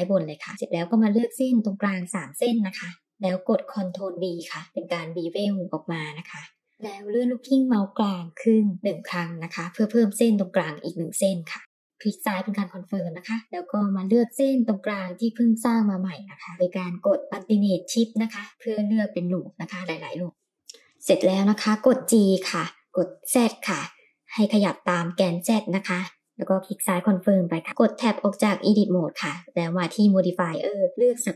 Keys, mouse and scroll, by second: 0.5 alt+click, 1.5 alt+shift+click, 2.7 alt+shift+click, 4.9 ctrl+b, 11.8-12.7 middle drag, 13.4 click, 18.1 alt+click, 20.3 ctrl+z, 21.5 g, 26.2-27.9 middle drag, 28.1 Tab, 29.1-30.6 drag.